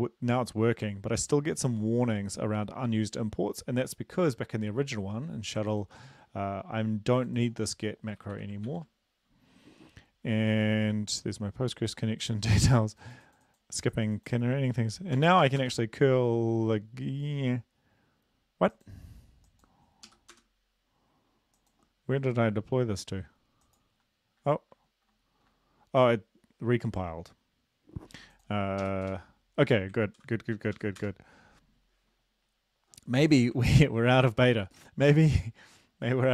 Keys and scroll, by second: 8.2 Delete, 8.3 Delete, 8.7 ctrl+s, 15.2 ctrl+l, 15.4 Up, 15.6 Return, 20.1 Up, 20.3 Return, 28.9 Up, 29.1 Return, 30.2 ctrl+l, 30.8 Up, 31.0 Return, 33.7 ctrl+`.